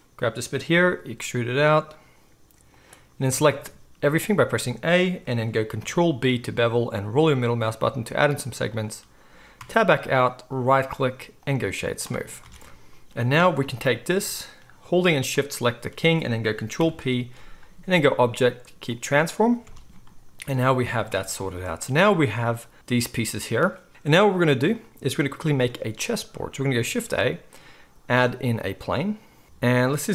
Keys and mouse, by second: 0.7 e, 2.8-10.6 middle drag, 3.3 a, 5.8 ctrl+b, 9.6 Tab, 10.6-15.3 drag, 11.7 z, 12.4 alt+a, 15.3 shift+middle click, 15.4-21.8 shift+drag, 16.7 ctrl+p, 19.6 alt+a, 21.8-24.5 right drag, 24.5 drag, 24.7-30.1 right drag, 26.9 shift+a.